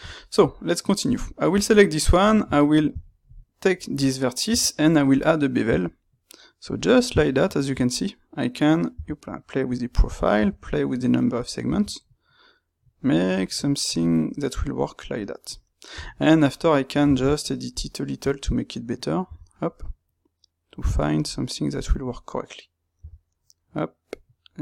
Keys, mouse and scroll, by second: 1.0 click, 1.6 Tab, 2.1 click, 2.4-15.4 ctrl+middle drag, 5.2 space, 15.4 click, 16.0 Tab, 17.0 ctrl+middle click, 17.7 shift+click, 19.2-22.9 middle drag, 19.2 g, 22.9 g.